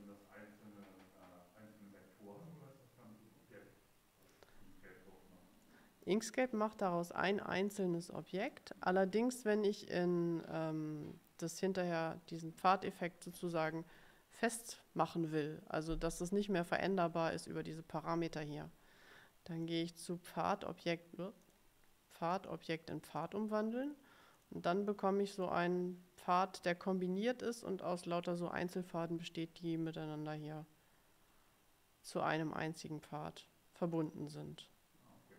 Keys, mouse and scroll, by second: 5.8 middle click, 6.6 middle click, 7.8 click, 19.7 click, 21.5 click, 22.4 click, 23.3 click, 24.5 click, 25.5 click, 34.1 click.